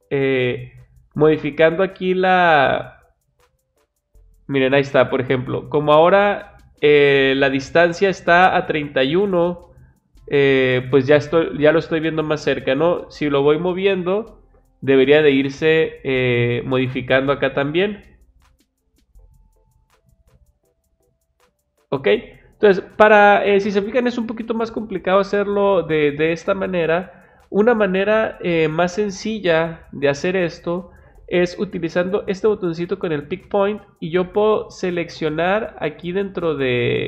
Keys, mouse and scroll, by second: 2.1 click, 12.7 click, 17.8-19.5 drag, 33.4 click.